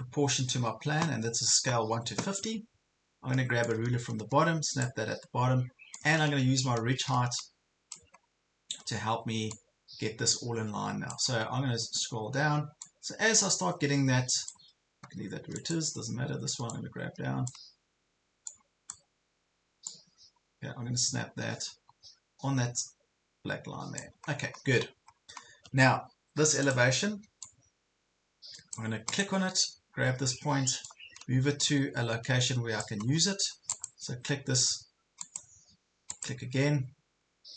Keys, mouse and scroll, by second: 0.6 ctrl+scroll up 1, 1.3 ctrl+scroll up 1, 3.7-8.0 drag, 8.2 ctrl+scroll up 1, 9.5-11.6 drag, 11.4-11.9 scroll up 2, 12.8-24.1 drag, 24.3 ctrl+scroll down 1, 25.4 ctrl+scroll down 1, 26.7-31.9 drag, 31.9-32.9 drag, 31.9 scroll up 1, 33.1 ctrl+scroll up 1, 33.8 click, 37.3 ctrl+scroll down 1.